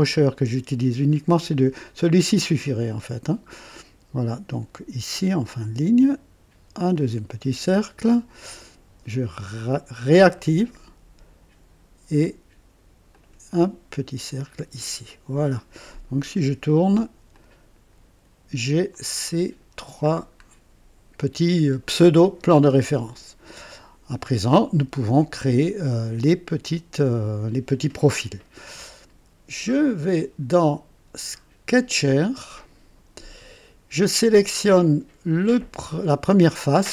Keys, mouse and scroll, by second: 5.4 click, 6.9 click, 10.3 click, 13.1 click, 14.3 click, 15.9-17.2 drag, 17.3-18.7 drag, 18.9-19.8 drag, 20.1-20.4 scroll down 2, 31.8 click, 35.9 click.